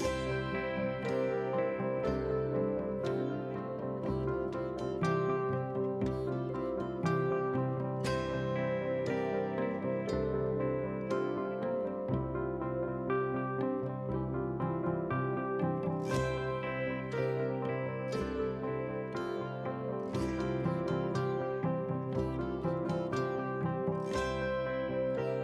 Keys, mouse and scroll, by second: 8.6 F7, 10.5-20.6 drag.